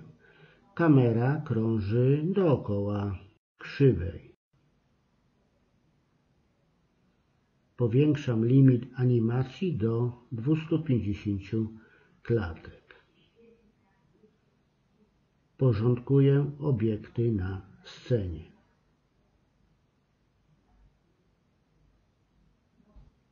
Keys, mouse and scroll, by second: 1.3-3.2 drag, 5.9 a, 6.9 click, 10.1-11.6 drag, 12.2-13.5 drag, 15.6 click, 16.9 click, 17.5 right click, 17.5 m, 19.2 click, 20.3 shift+c.